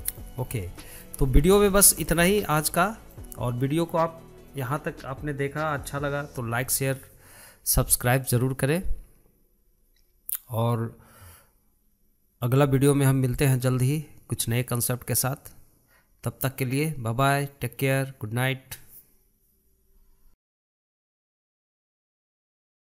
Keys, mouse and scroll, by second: 0.4-1.2 shift+middle drag, 1.2-1.5 scroll up 2, 1.5-2.4 shift+middle drag, 2.4-2.7 scroll up 3, 2.7-3.2 shift+middle drag, 3.2-3.7 scroll down 4, 3.7-4.1 shift+middle drag, 4.1-4.9 scroll up 6, 4.9-22.9 shift+middle drag.